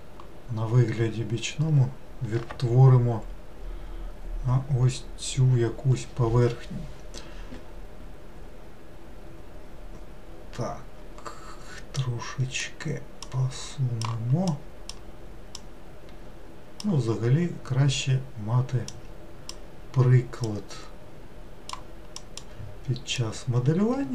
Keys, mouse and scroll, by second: 12.0 click, 13.3 click, 15.6 click, 19.0 click, 20.5 click, 23.2 click.